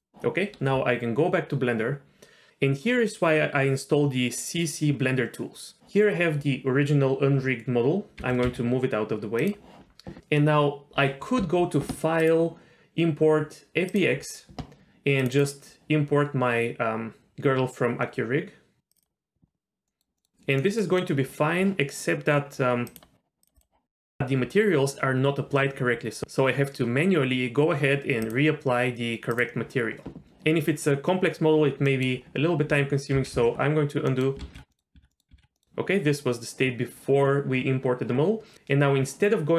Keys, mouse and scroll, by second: 8.2 g, 12.2-14.0 drag, 19.9 middle click, 20.2 middle click, 20.6 middle click, 20.9 middle click, 22.9 click, 26.2 ctrl+z, 28.3-29.5 drag, 31.8 middle click, 33.5 ctrl+z, 33.8 ctrl+z, 34.1 middle click, 34.7 ctrl+z, 34.8 middle click, 35.1 middle click, 35.4 ctrl+z, 35.5 middle click.